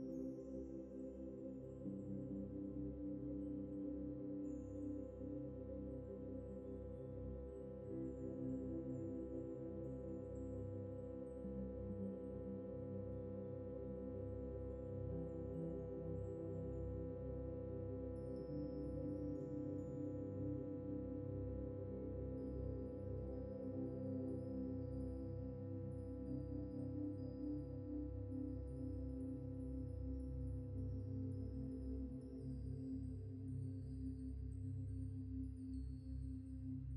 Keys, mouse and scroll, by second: 3.1 ctrl+-, 3.9 double click, 5.9 alt+Tab, 12.3 scroll down 1, 13.0 scroll up 1, 14.4 alt+Tab, 16.4 alt+Tab, 23.4 alt+Tab, 25.9 alt+Tab, 26.0 alt+Tab, 26.1 alt+Tab, 33.4 typing.